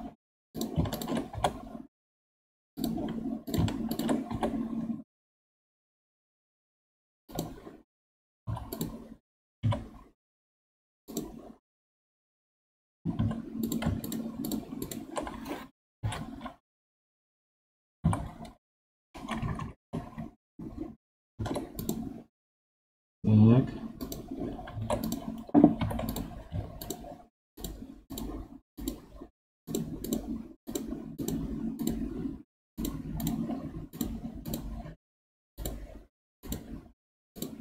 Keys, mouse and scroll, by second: 0.4 click, 0.8 shift+click, 1.2 g, 3.4 click, 3.8 shift+click, 4.2 g, 8.3 2, 8.6 click, 9.5 1, 11.0 click, 13.1 3, 13.5 click, 13.9 shift+click, 14.3 shift+click, 14.7 shift+click, 16.0 F3, 19.5 Down, 21.3 ctrl+Tab, 23.9 click, 24.7 ctrl+Tab, 25.7 2, 26.0 alt+click, 26.7 alt+shift+click, 27.5 alt+shift+click, 28.0 alt+shift+click, 28.7 alt+shift+click, 29.6 alt+shift+click, 29.9 alt+shift+click, 30.6 alt+shift+click, 31.1 alt+shift+click, 31.7 alt+shift+click, 32.7 alt+shift+click, 33.1 alt+shift+click, 33.8 alt+shift+click, 34.4 alt+shift+click, 35.5 alt+shift+click, 36.3 alt+shift+click, 37.3 alt+shift+click.